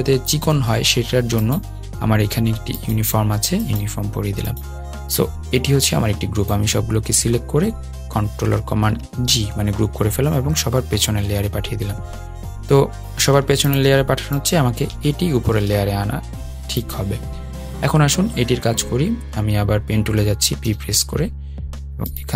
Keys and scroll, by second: 8.3 super+g, 11.5 super+[, 15.3 super+].